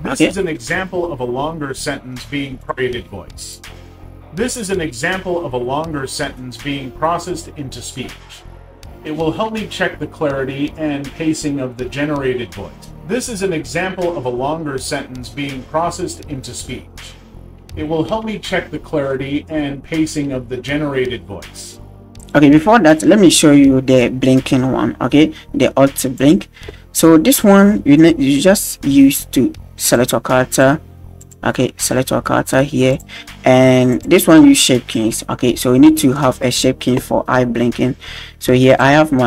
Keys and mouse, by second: 2.7 drag, 2.8-5.6 middle drag, 3.6-4.7 drag, 9.1 shift+click, 13.3 click, 14.9-16.6 drag, 17.9 shift+click, 21.7-22.1 shift+drag, 22.2 drag, 22.9 click, 26.2 click, 29.9 click, 30.5 click, 31.2 click, 32.9-33.9 drag, 36.5 click.